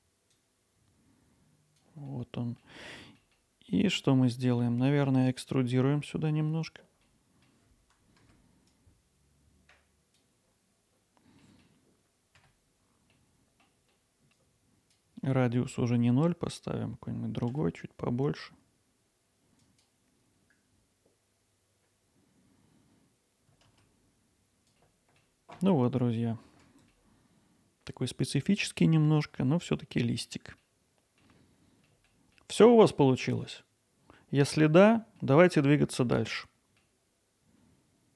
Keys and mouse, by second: 4.3 middle drag, 7.4 middle click, 8.3 Tab, 8.8-9.6 drag, 9.7 middle click, 10.0 KP_7, 10.3 middle click, 10.6 middle click, 11.4 e, 13.0 click, 13.1 e, 13.6 click, 14.4-17.4 drag, 17.5 alt+s, 19.6-21.6 drag, 21.7 alt+s, 22.6 click, 22.9 alt+s, 23.6 click, 23.8 alt+s, 27.0-29.4 alt+middle drag, 31.0 middle click, 31.9 alt+middle click, 32.5 alt+middle click.